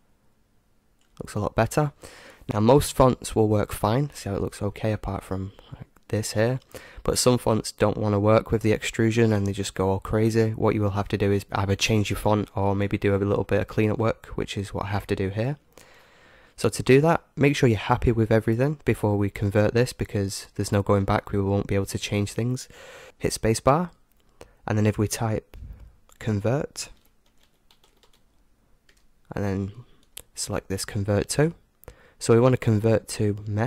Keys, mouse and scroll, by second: 3.7-6.5 middle drag, 6.8-8.7 middle drag, 10.4 middle click, 10.7-12.6 middle drag, 13.1-15.0 middle drag, 15.8-18.9 middle drag, 20.7-22.2 scroll up 1, 22.2-22.7 scroll up 1, 23.0 space.